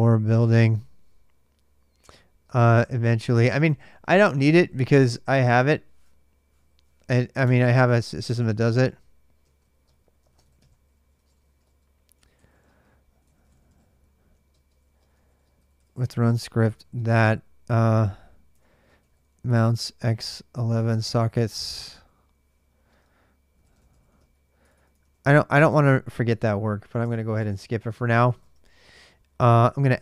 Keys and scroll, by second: 0.0-0.8 typing, 2.1-4.5 typing, 6.3 Up, 7.2 Return, 9.2-25.4 typing, 25.5 Return, 26.8 Return, 27.8-30.0 typing.